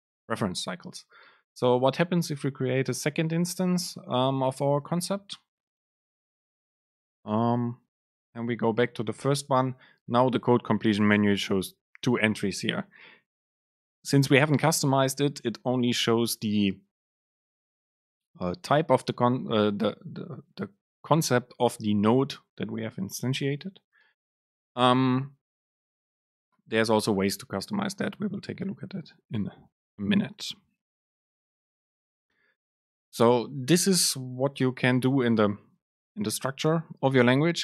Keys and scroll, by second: 9.4 super+space.